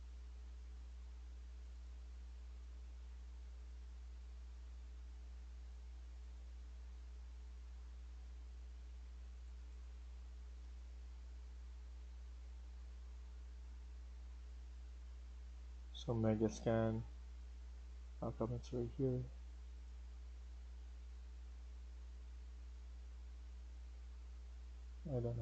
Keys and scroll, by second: 14.2 Escape, 24.8 Escape, 25.1 Escape.